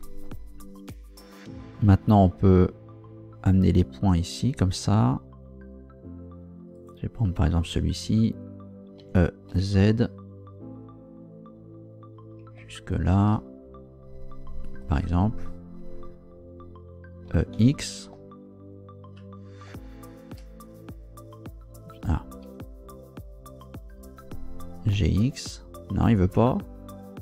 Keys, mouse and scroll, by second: 6.7 right click, 9.0 e, 9.5 z, 14.6 ctrl+shift+click, 17.3 e, 17.5 x, 22.4 Escape, 24.9 g, 25.2 x, 26.4 Escape.